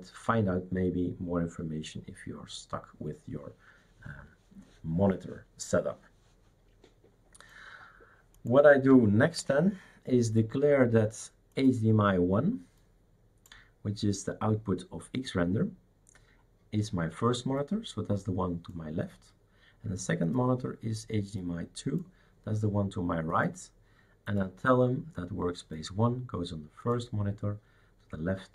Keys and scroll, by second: 9.4 shift+super+q.